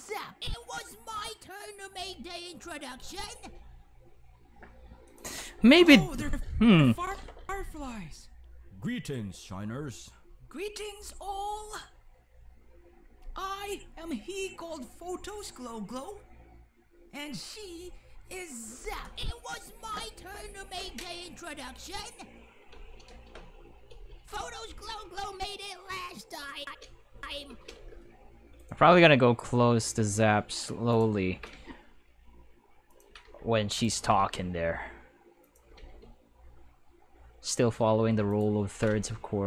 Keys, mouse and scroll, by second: 3.5 space, 5.1 click, 5.6-7.4 typing, 22.7 space, 23.9 space, 26.6 space, 27.1 space, 27.5 space, 27.8 g, 28.6 right click, 28.8 g, 30.9 click, 31.1-36.3 typing, 32.9 click, 35.4 click, 38.3 click, 38.5-39.4 typing.